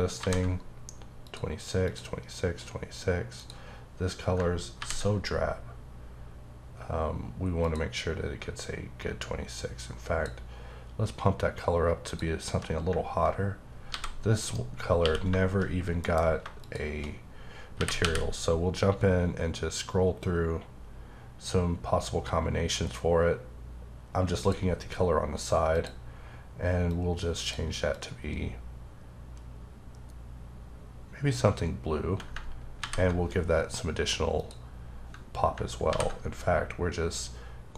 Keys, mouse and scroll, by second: 0.2 ctrl+v, 1.2 click, 1.8 click, 3.4 click, 4.8 ctrl+v, 7.6 click, 9.2 click, 12.1 click, 13.9 g, 14.4 right click, 15.0 q, 16.6 shift+click, 17.7 typing, 18.6-21.3 scroll up 5, 21.3-22.6 scroll up 2, 22.6-23.4 scroll up 1, 23.4-23.9 scroll up 1, 24.4 click, 25.7 click, 26.9 click, 27.9 click, 32.8 ctrl+v, 34.4 click, 35.9 ctrl+v.